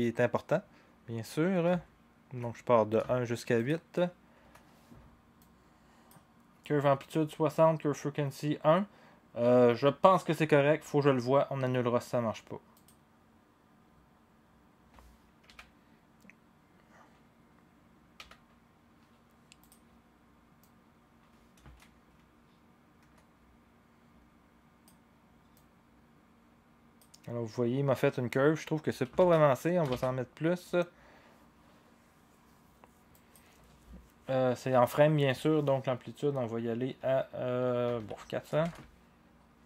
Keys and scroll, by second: 15.5 v, 18.2 v, 29.1 ctrl+z, 29.9 ctrl+z, 37.6-38.5 typing, 38.6-39.6 Return.